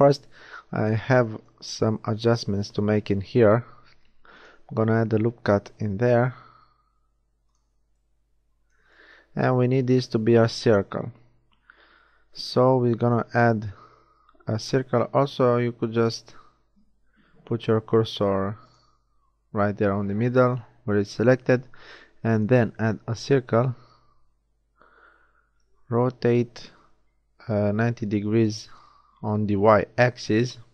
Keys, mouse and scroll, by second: 1.8 a, 3.7 ctrl+r, 8.0-9.0 middle drag, 9.0 z, 11.5 shift+a, 15.2 middle click, 15.9 shift+a, 18.8 shift+s, 20.4 middle click, 21.1 shift+a, 24.8 r, 29.5-30.7 middle drag.